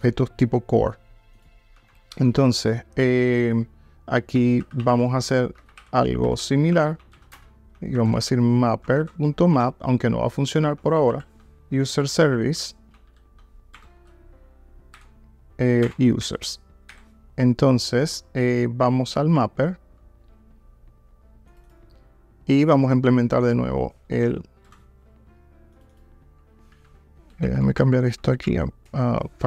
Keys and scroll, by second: 1.8 Tab, 8.9 Return, 13.8 Return, 15.9 Return, 26.8 super+x.